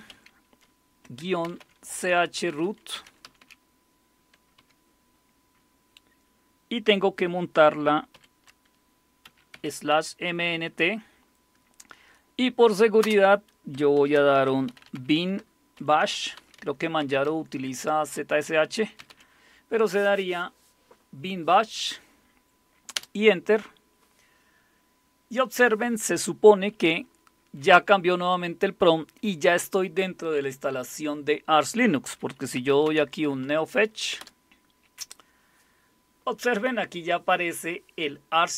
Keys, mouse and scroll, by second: 0.0-3.9 typing, 4.6 Tab, 8.1-10.4 typing, 13.0-19.6 typing, 22.9 Return, 32.3-33.5 typing, 34.2 Return.